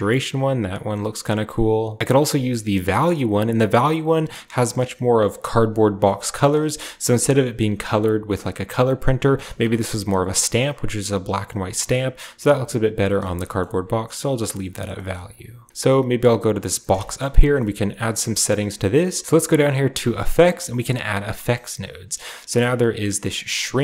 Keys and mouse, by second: 6.0 click, 6.7 shift+click, 13.1 shift+click, 13.4 click, 14.5 click, 14.8 shift+click, 15.9 click, 16.7 click, 16.9 shift+click, 17.4 shift+click, 20.6 click, 21.9-23.8 drag.